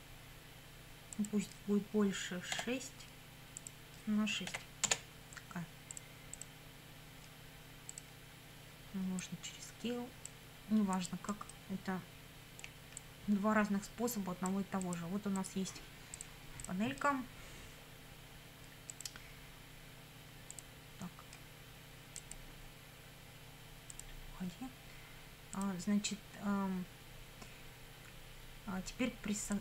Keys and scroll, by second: 2.6 6, 4.5 6, 4.9 Return.